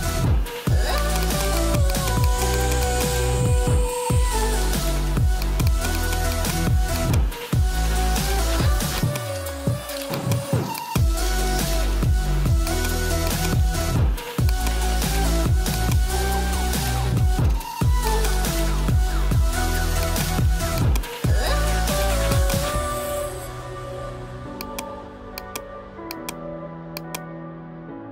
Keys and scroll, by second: 16.8 ], 21.9 ], 27.5 ].